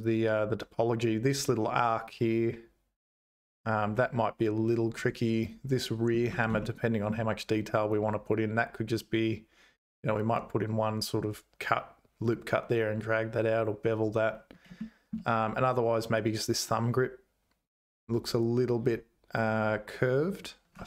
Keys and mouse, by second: 6.8 shift+middle click, 15.0 shift+right click, 15.0 shift+middle click.